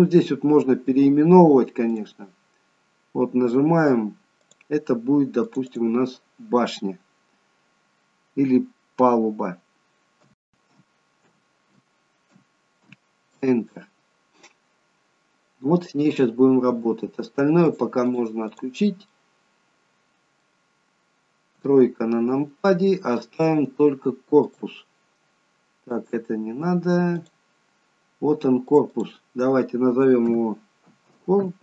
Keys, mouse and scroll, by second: 2.1 click, 4.5 click, 17.6 click, 18.1 click, 19.0 middle click, 21.5 KP_3, 24.4 click, 25.9-28.8 click.